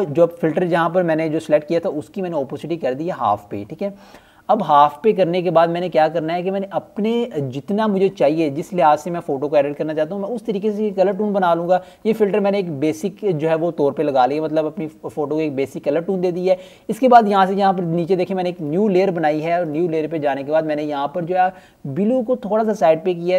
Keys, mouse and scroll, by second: 4.9 click, 7.6 click, 13.2-13.8 scroll down 1, 13.8 right click, 14.5 click, 14.9-19.2 scroll up 1, 20.3 click.